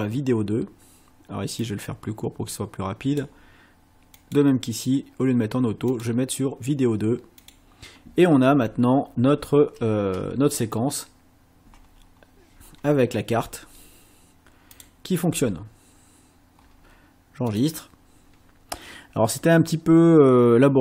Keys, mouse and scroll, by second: 1.6-3.5 drag, 4.2 click, 5.9 click, 7.4 click, 10.3 space, 12.8 ctrl+scroll down 2, 14.8 click, 15.3 space, 17.5 click.